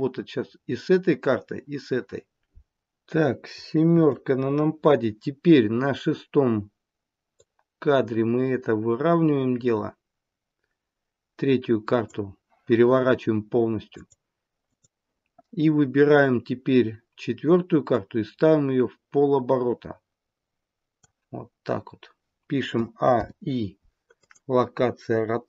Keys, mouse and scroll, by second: 3.8 KP_7, 7.3 click, 13.9 click, 14.6 click, 17.9 click, 22.6 a, 23.0 i.